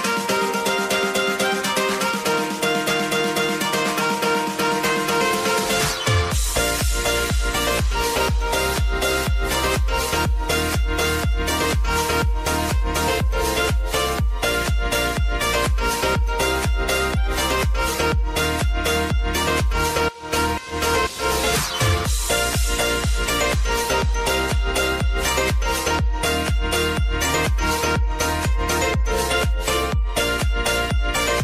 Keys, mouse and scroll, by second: 0.6 ctrl+v, 1.8 Tab, 2.5 ctrl+v, 3.0 Tab, 3.9 ctrl+v, 4.9 Tab, 5.4 ctrl+v, 6.6 Tab, 7.2 ctrl+v, 8.3 Tab, 8.9 ctrl+v, 9.9 Tab, 10.5 ctrl+v, 13.2 ctrl+a, 14.4-17.7 drag, 23.3-25.9 drag, 27.7 Return, 28.7 click.